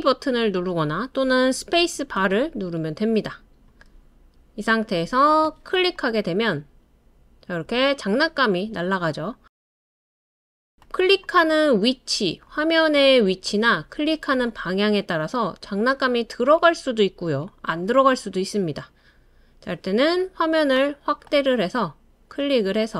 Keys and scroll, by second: 2.2 space, 16.3 typing.